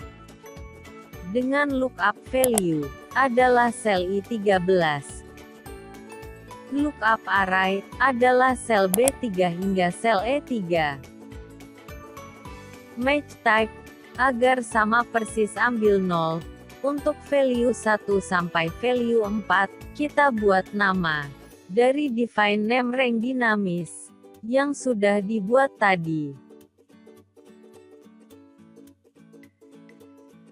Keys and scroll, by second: 3.3 F4, 10.2 F4.